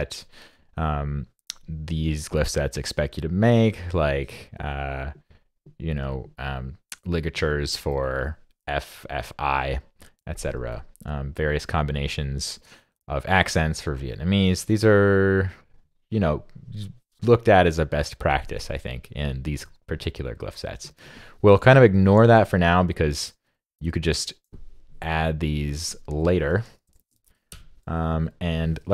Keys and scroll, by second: 22.2 super+Left, 26.9 shift+super+Down.